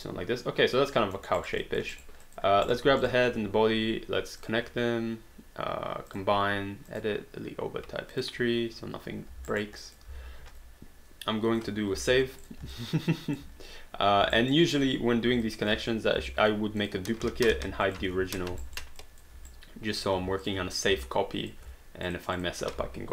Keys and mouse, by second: 1.2 alt+middle click, 1.4 alt+right click, 1.6 alt+click, 2.0 alt+right click, 2.3 alt+click, 2.7 click, 3.0 shift+click, 4.5 click, 6.1 click, 8.1 click, 9.5 alt+right click, 9.8 alt+click, 12.0 ctrl+s, 12.4 click, 12.7 alt+click, 14.4 alt+right click, 15.4 alt+click, 16.2 ctrl+d, 16.8 click, 17.5 h, 17.9 click, 18.8 alt+right click, 19.0 alt+click, 19.5 right click, 20.2 q, 20.4 click, 20.8 shift+click, 21.1 alt+click, 22.1 shift+click.